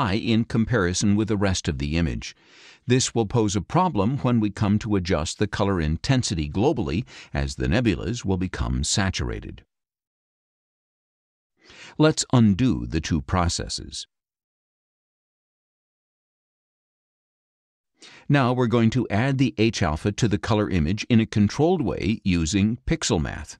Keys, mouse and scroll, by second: 3.7-9.8 drag, 13.1 click, 14.0 click, 17.0 click, 17.7 scroll up 1, 22.1 click.